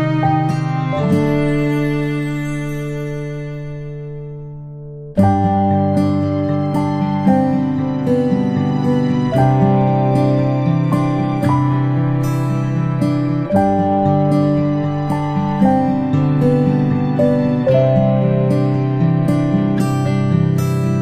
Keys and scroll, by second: 0.6 ctrl+Delete, 9.4 ctrl+p.